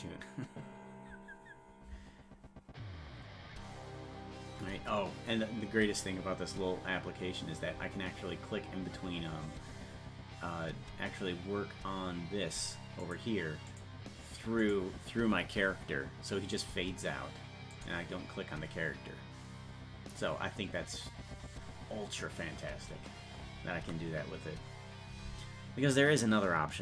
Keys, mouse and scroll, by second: 13.0 click, 13.7 click, 14.6 click, 17.7 click.